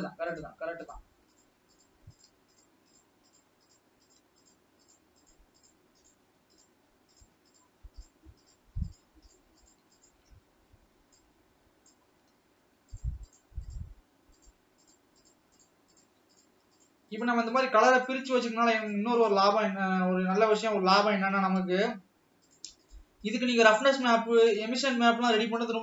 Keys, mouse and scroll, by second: 0.3-0.8 shift+drag, 1.4 shift+click, 1.8 shift+click, 2.2 shift+click, 2.6 shift+click, 2.9 shift+click, 3.3 shift+click, 3.7 shift+click, 4.1 shift+click, 4.9 shift+click, 5.6-5.9 shift+drag, 6.6-6.9 shift+drag, 7.6 shift+drag, 8.8 shift+click, 9.4 shift+click, 11.2-13.2 drag, 13.3 shift+click, 13.7-14.1 shift+drag, 15.2 shift+click, 15.7-16.3 shift+drag, 17.0 shift+click, 17.6 shift+click, 18.1 shift+click, 18.9 shift+click, 19.2 shift+click, 20.6-21.3 drag, 21.3 scroll up 2, 22.9 shift+click, 23.4 shift+click, 23.7 shift+click, 24.1 shift+click, 24.5 shift+click, 24.9 shift+click.